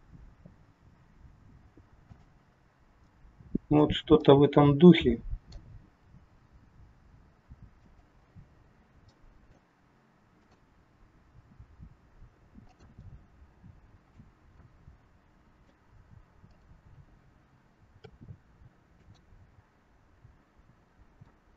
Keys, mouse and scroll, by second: 3.0 middle click, 5.7 middle click, 5.7 g, 9.0 middle click, 10.3 click, 11.0 g, 13.0 middle click, 16.4 middle click, 16.4 click, 18.0 r, 21.3 middle click.